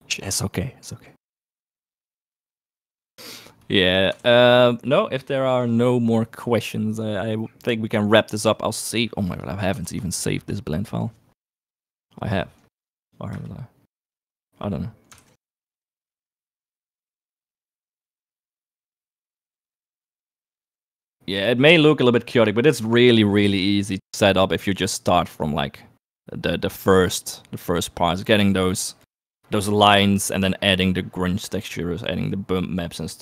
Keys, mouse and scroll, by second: 3.5 right click, 4.4 ctrl+s, 9.4 right click, 10.0 ctrl+s, 15.3 ctrl+s, 18.3 click, 22.2 click, 23.2 click.